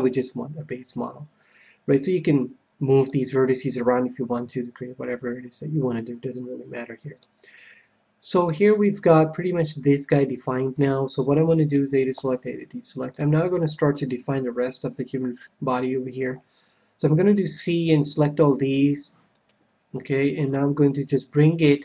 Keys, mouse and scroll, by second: 3.0-4.8 middle drag, 5.1 KP_1, 7.2-10.5 middle drag, 10.5 KP_1, 11.5 a, 12.1 a, 13.0-14.8 middle drag, 14.8-15.2 scroll down 1, 15.2-17.3 middle drag, 16.9 c, 19.4-21.2 right drag, 20.4-21.8 drag.